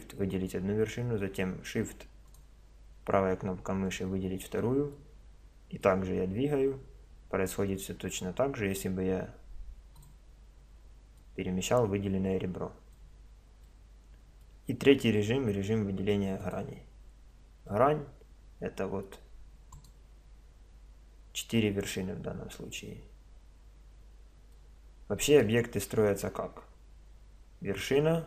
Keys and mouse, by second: 2.3-3.9 drag, 3.9-5.8 middle drag, 5.8-7.6 drag, 10.0-13.0 drag, 13.7-16.4 middle drag, 16.4-17.9 drag, 17.9-19.0 middle drag, 19.8-21.3 drag, 21.3-22.8 middle drag, 25.3-27.0 drag, 27.0-28.2 middle drag.